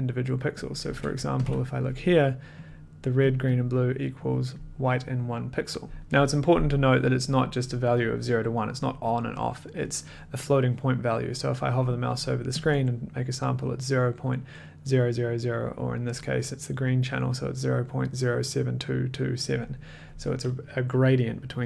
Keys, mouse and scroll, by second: 0.7 click, 0.9-1.4 typing, 1.4 click, 2.6 click, 3.2 click, 3.5 click, 4.5 click, 12.6 ctrl+click, 17.6 ctrl+click.